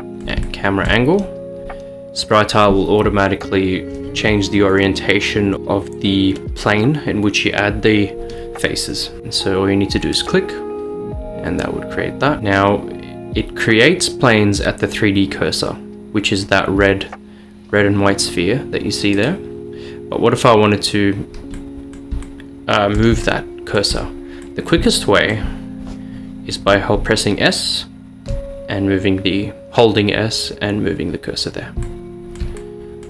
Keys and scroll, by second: 27.1-33.0 typing.